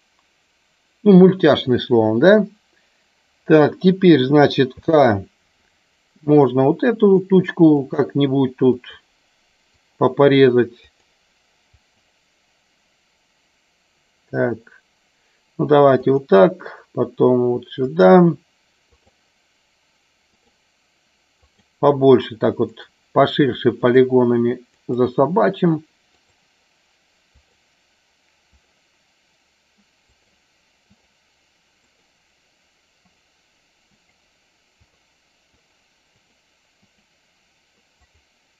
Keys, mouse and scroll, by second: 4.6 k.